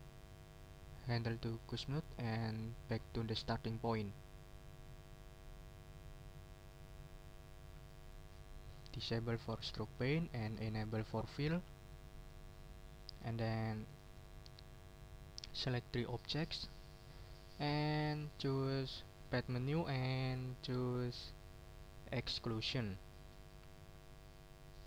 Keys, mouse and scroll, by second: 2.8 click, 6.6 click, 7.6 middle click, 9.8 click, 10.4 click, 11.3 click, 11.9 middle click, 12.5-12.8 ctrl+scroll down 2, 13.0 ctrl+middle click, 13.9 click, 14.2 middle click, 15.4-16.5 drag, 19.2 click, 22.4 click, 22.9 middle click, 24.3 middle click.